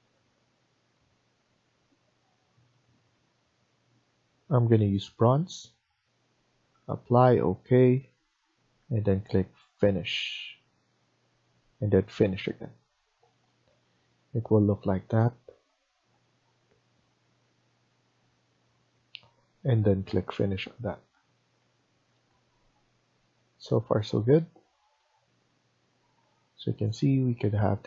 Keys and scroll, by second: 21.5 Escape.